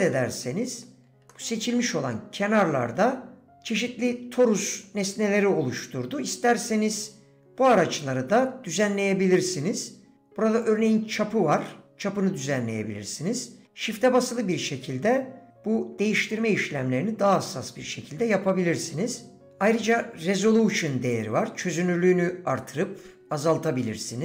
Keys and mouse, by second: 0.1 click, 0.5 middle click, 1.3 middle click, 10.6-19.5 drag, 21.1-24.2 drag.